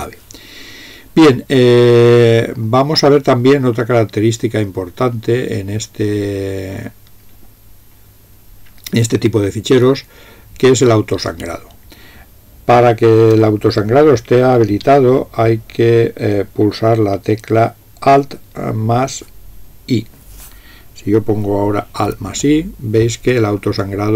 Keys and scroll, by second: 22.1 alt+i.